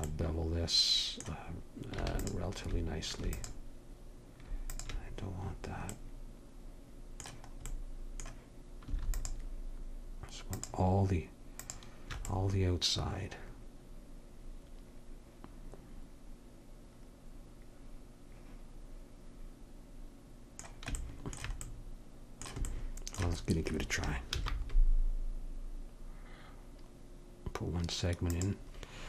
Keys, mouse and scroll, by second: 1.0-2.2 middle drag, 2.2-5.4 drag, 6.4 click, 9.1-13.5 drag, 24.3 ctrl+b.